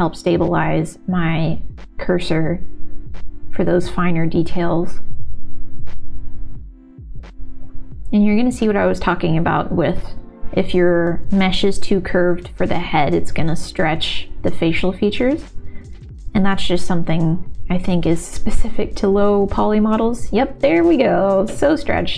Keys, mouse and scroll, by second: 0.6 ctrl+z, 1.6 click, 3.6 shift+x, 4.1 click, 6.5 click, 7.3 ctrl+z, 7.6-9.3 drag, 9.5 click, 12.9 ctrl+z, 13.0 ctrl+z, 13.1 click, 13.3 ctrl+z, 13.8 click, 14.3 click, 14.6 ctrl+z, 15.1 shift+x, 15.3 shift+x, 15.5 click, 15.7 click, 16.0 click, 16.2 click, 16.6 ctrl+z, 16.7 click, 16.9 click, 17.6 ctrl+s, 17.7 alt+a, 18.3 shift+x, 19.0 ctrl+z, 19.2 middle click, 19.7 middle click, 21.0 click, 21.8 middle click.